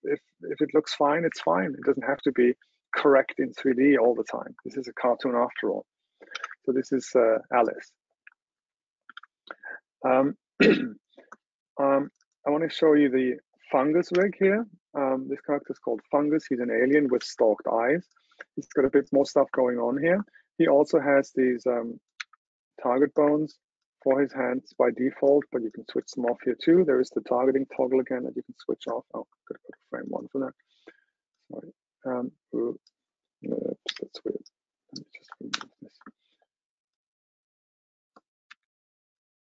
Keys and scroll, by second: 6.4 super+w, 9.2 super+h, 14.1 super+0.